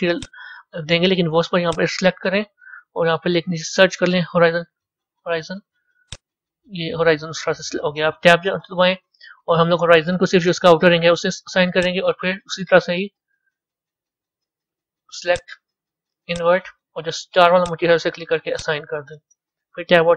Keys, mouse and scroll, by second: 0.0 click, 1.5-4.6 drag, 8.3 b, 11.7 click, 15.2 click, 17.5 click, 18.4 click, 19.6 Tab.